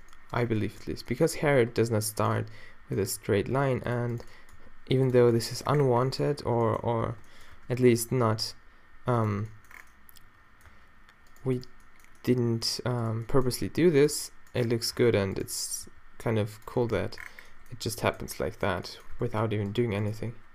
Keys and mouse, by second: 1.4 g, 3.1 g, 4.6 g, 5.2 Tab, 6.6 Tab, 7.0 Tab, 7.5 Tab, 7.8 g, 9.4 Tab, 10.7 Tab, 13.5 g, 15.0 Tab, 15.9 g, 16.8 Tab, 16.8-18.3 drag, 19.2 Tab, 20.1 g.